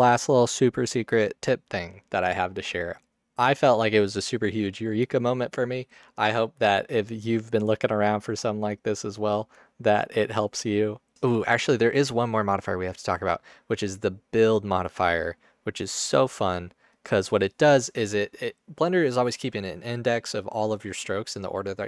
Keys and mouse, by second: 14.0-17.1 drag.